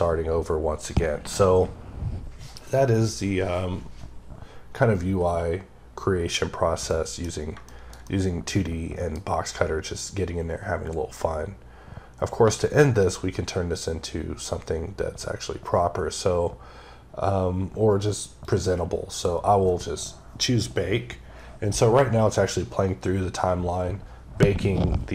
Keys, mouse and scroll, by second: 6.7 click, 6.8 middle click, 7.1 scroll down 2, 7.5 shift+middle click, 7.9 double middle click, 9.5 scroll up 2, 10.1-11.3 scroll down 1, 18.3 click.